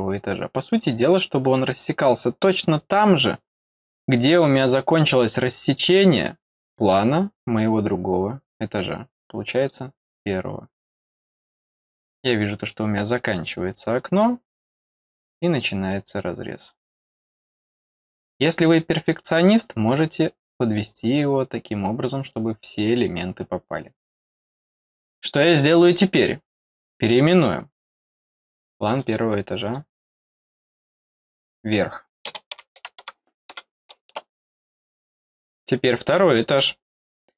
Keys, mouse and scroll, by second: 1.4 click, 4.1 click, 9.4 click, 9.6 click, 11.8 click, 13.6 click, 15.9 click, 18.6 click, 21.5 scroll down 1, 22.2 middle click, 23.0 middle click, 25.1 click, 26.9 right click, 28.0 click, 29.6 click, 30.1-31.7 drag.